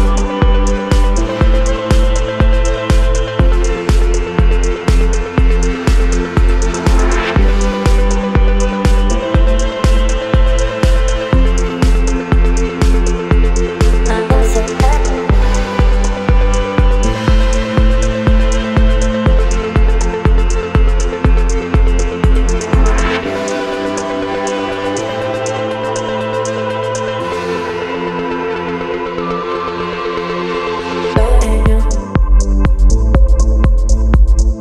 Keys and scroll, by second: 3.5 Return, 16.3 Return, 32.8 space.